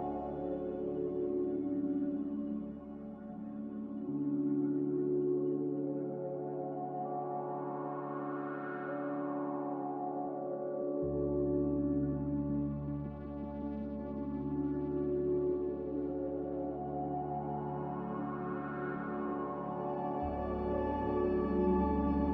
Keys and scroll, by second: 5.3 m, 21.5 f.